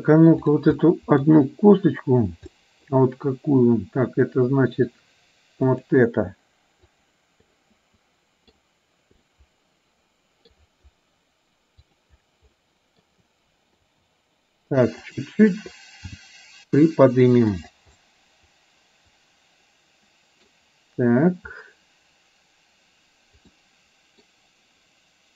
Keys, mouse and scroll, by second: 0.6 click, 0.8-1.2 scroll up 1, 1.2 middle click, 2.6 middle click, 5.8 click, 6.9 click, 7.6-8.6 middle drag, 9.3-10.7 drag, 11.9 click, 12.6 middle click, 14.3 r, 16.2 g, 18.1-20.7 middle drag, 23.6 middle click.